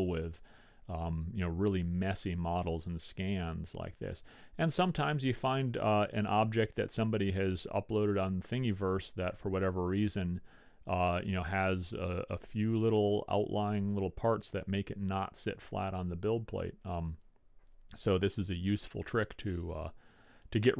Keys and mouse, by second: 19.6-20.7 middle drag.